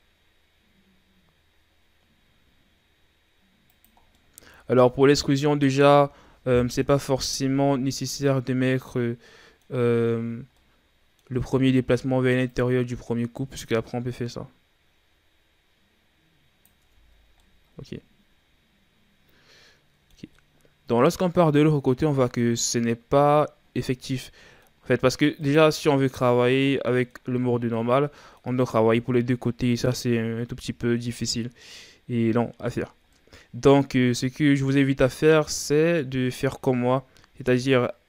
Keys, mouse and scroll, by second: 4.0 scroll down 1, 4.2 middle click, 4.5 Tab, 4.8-5.4 middle drag, 5.4-5.9 scroll up 1, 5.9 a, 7.1 KP_1, 8.2-8.7 scroll down 2, 8.7-10.1 middle drag, 10.1-10.6 scroll up 4, 10.6-11.3 middle drag, 11.3 Tab, 12.5-15.5 drag, 16.8 Tab, 17.2 scroll down 2, 17.4-25.4 middle drag, 25.4 right click, 25.8-30.8 middle drag, 33.1-36.1 middle drag.